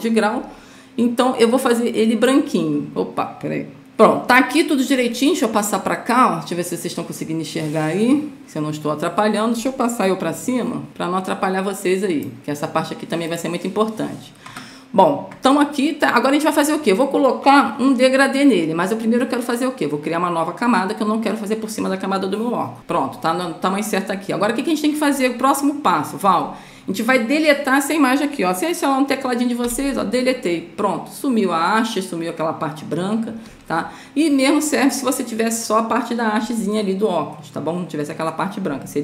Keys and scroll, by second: 3.8 ctrl+0, 10.9 Up, 30.0 Delete.